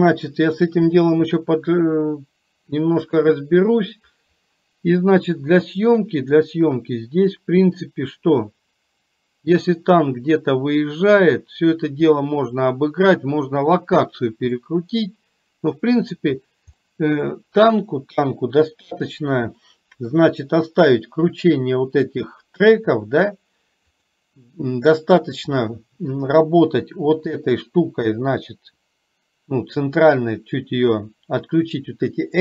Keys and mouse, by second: 1.1 click, 6.6-11.4 drag, 12.2-13.1 middle drag, 14.7-16.2 middle drag, 17.0 middle click, 18.2 KP_3, 19.7 shift+middle click, 24.0 click.